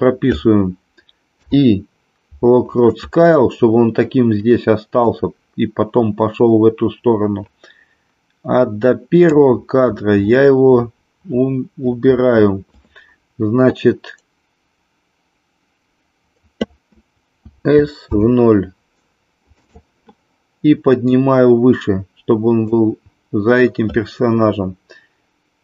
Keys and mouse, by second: 5.2-9.4 drag, 17.4 s, 18.0 KP_0, 19.5 click, 21.0-22.8 drag.